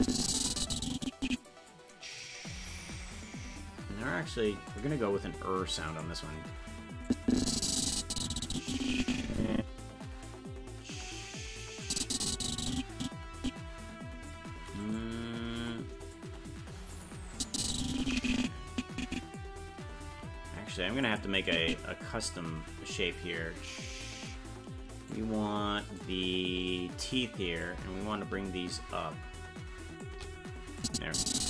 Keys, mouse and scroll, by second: 4.7 click, 5.9 click, 7.1-10.2 drag, 11.8-14.3 drag, 14.8 right click, 15.6 g, 17.3-19.3 drag, 20.0 g, 21.5 click, 23.9 right click, 25.2 right click, 26.5 right click, 27.6-30.0 drag, 30.8-31.4 drag.